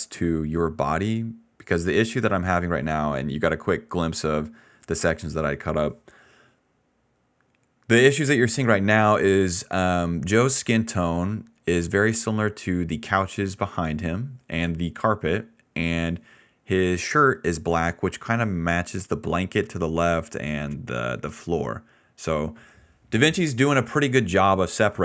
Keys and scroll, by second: 0.2-2.9 typing.